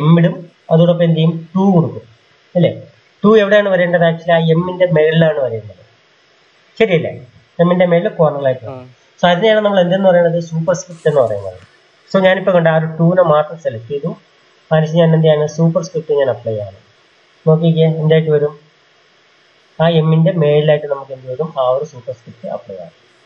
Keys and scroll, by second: 1.4 2, 9.6 shift+Left.